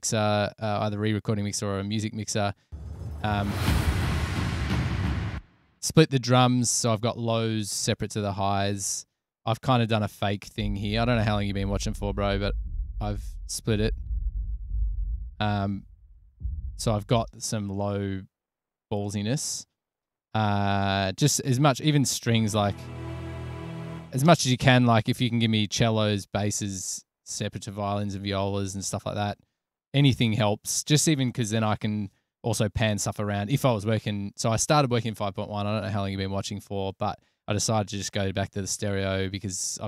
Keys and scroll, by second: 3.0 space, 5.6 space, 10.7 typing, 17.5 space, 22.3 typing, 24.6 space.